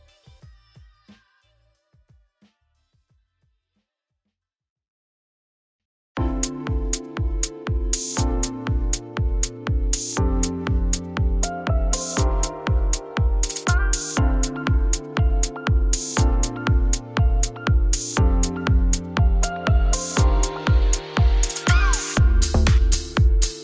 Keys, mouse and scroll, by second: 0.0-1.0 middle drag, 1.0 3, 1.4 click, 1.8 ctrl+shift+click, 1.9 x, 2.7 click, 3.3 ctrl+shift+click, 3.6 x, 4.7 click, 5.1 shift+click, 5.3 shift+click, 5.6 shift+click, 5.8 x, 6.3 middle click, 6.5 alt+e, 7.7 shift+click, 8.2 shift+click, 8.6 shift+click, 8.8 shift+click, 9.5 alt+e, 11.5 click, 12.1 click, 12.3 shift+click, 12.5 middle click, 12.9 shift+click, 13.1 middle click, 13.7 shift+click, 14.1 KP_3, 16.8 ctrl+z, 17.0 ctrl+z, 17.4 e, 18.1 e, 19.0 ctrl+z, 19.1 ctrl+z, 19.7 e, 22.6 middle click, 23.1 Tab.